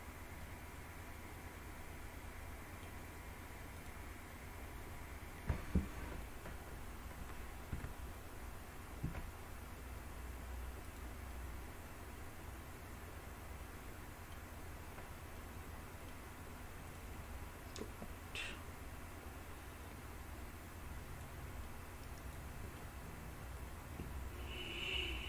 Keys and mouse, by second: 0.6-1.7 middle drag, 1.7-2.9 drag, 3.9 click, 4.4-5.5 middle drag, 7.8 Tab, 9.1 s, 11.0 click, 11.4-14.4 middle drag, 15.6-16.2 middle drag, 17.9-21.4 drag, 21.9-22.9 middle drag, 23.7-25.2 drag.